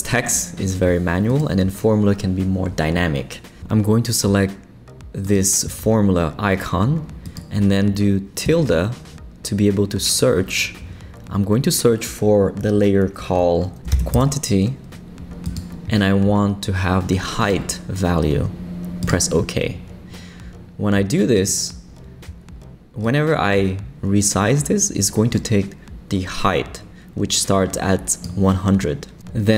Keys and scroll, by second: 13.5-14.6 typing.